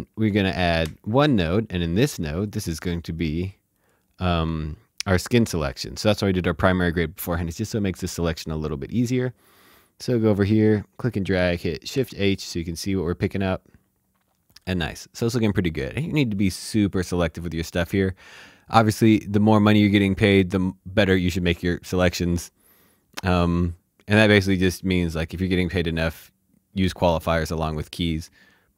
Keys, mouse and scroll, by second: 0.8 alt+s, 1.8 click, 2.4 right click, 3.7 click, 9.0 click, 11.9 shift+h, 12.5 click, 23.6 click.